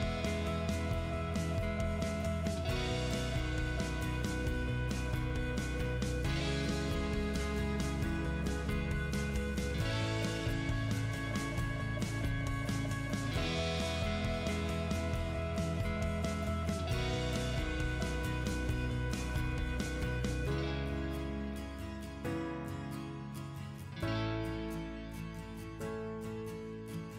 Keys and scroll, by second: 1.2 Escape, 2.8 Return, 3.7 space, 4.3 1, 5.7 ', 6.8 -, 7.2 0, 8.5 shift+', 9.2 space, 9.6 x, 11.1-13.8 typing, 15.1 BackSpace, 18.8 Return, 23.1 Delete, 24.9 c, 25.4 space.